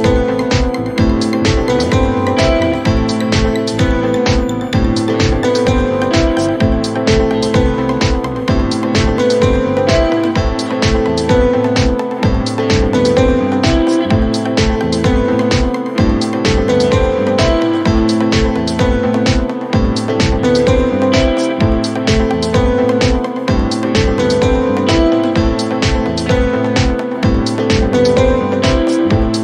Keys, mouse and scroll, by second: 0.9 alt+click, 1.2 g, 2.5 ctrl+z, 3.3 2, 5.4 click, 5.9 shift+middle click, 6.3 g, 8.4 r, 10.2 g, 11.8 r, 14.2 g, 16.1 ctrl+z, 17.0 1, 17.9 click, 18.1 shift+middle click, 18.7 g, 23.3 shift+click, 23.5 g, 25.4 click, 25.8 shift+middle click, 26.1-26.5 shift+scroll up 1, 26.5 z, 26.6 scroll down 4, 27.2 Tab, 27.4-27.8 middle drag, 27.8 scroll down 3, 28.1 click, 28.4 middle click, 28.7 KP_1, 29.2-29.4 shift+middle drag.